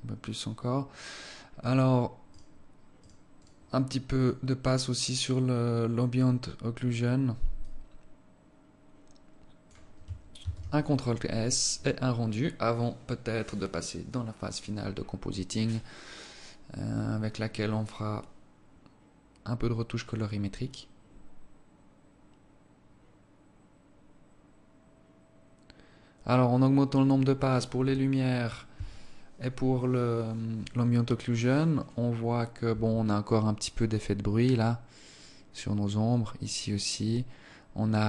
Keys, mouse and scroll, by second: 2.8 right click, 3.5 right click, 3.9 right click, 4.7 click, 8.1 click, 10.9 ctrl+s.